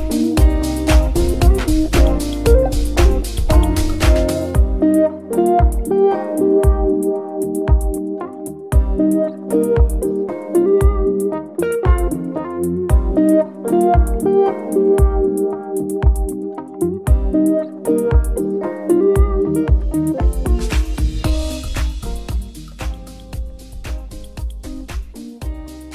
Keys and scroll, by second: 0.0 Return, 1.6 F2, 2.2-6.1 typing, 2.7 Left, 6.8 ctrl+a, 7.2 ctrl+c, 7.4 Return, 9.1 F2, 9.7 ctrl+v, 10.4 BackSpace, 10.6 Return, 10.6 2, 11.7 F2, 12.3 ctrl+v, 13.0 BackSpace, 14.0 3, 14.4 Return, 16.1 F2, 16.6 ctrl+v, 17.6 BackSpace, 17.9 d, 18.2 w, 18.6 ctrl+a, 19.0 c, 19.9 Right, 20.2 Return, 21.5 F2, 22.1 ctrl+v, 22.4 Left, 22.8 BackSpace, 23.2 2, 23.3 Return, 25.1 F2.